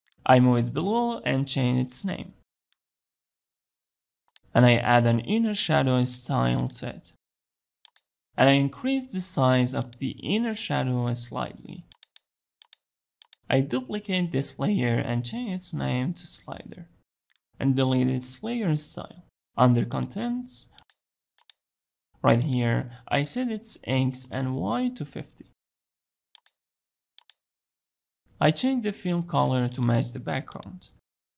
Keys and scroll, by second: 14.0 ctrl+d.